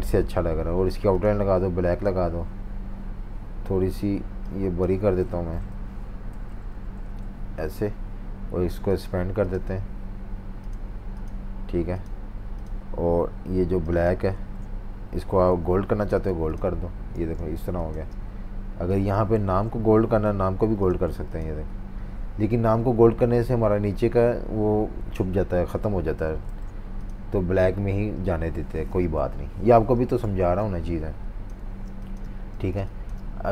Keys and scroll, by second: 5.2 Tab, 7.0 Down, 14.4 super+z, 15.4 i, 16.2 v, 17.2 v, 17.8 space, 19.4 super+z, 20.2-21.2 typing, 26.5 super+z, 29.1 super+-, 29.3 super+-, 30.2 typing, 31.6-33.5 typing.